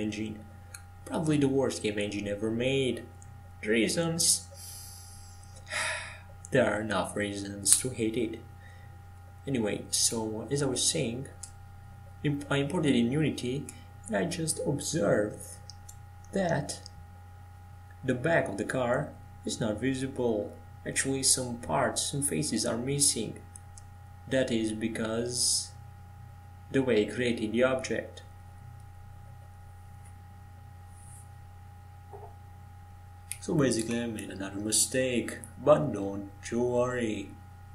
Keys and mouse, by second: 0.2 right click, 8.4 ctrl+j, 14.3 ctrl+j, 16.5-17.5 middle drag, 17.5-23.8 right drag, 23.8 ctrl+j, 23.8-25.9 drag, 25.9-28.1 middle drag, 28.9-33.0 middle drag, 33.0 right click, 33.8 middle click, 34.6-36.0 drag, 36.0 ctrl+j, 36.9 click.